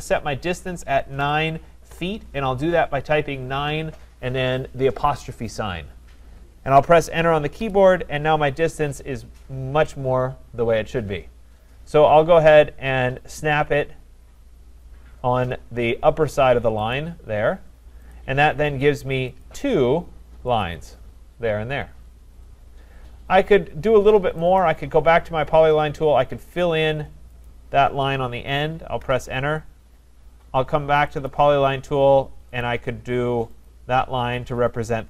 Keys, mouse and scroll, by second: 0.0-5.0 drag, 1.2-1.9 typing, 7.6 Return, 17.0 click, 18.1 click, 19.5 click, 20.7 click, 26.6 click, 27.5 click, 29.0 Return, 31.3 click, 32.6 click, 33.6 click, 34.3 Return.